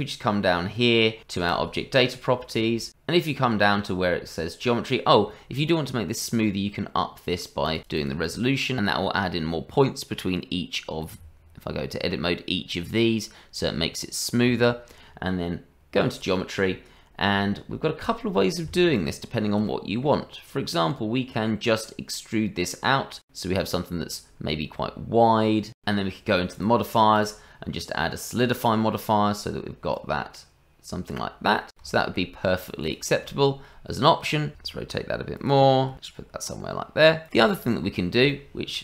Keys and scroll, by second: 11.2 Tab, 14.5 Tab, 34.5 r, 35.5 g.